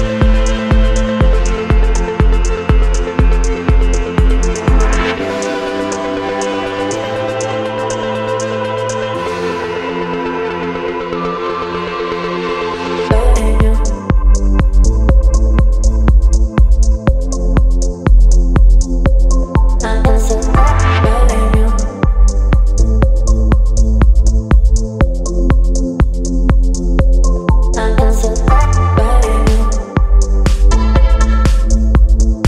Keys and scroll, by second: 6.5 space, 9.8 space, 12.0 space, 26.8 KP_9, 27.3 KP_0, 31.5 Return.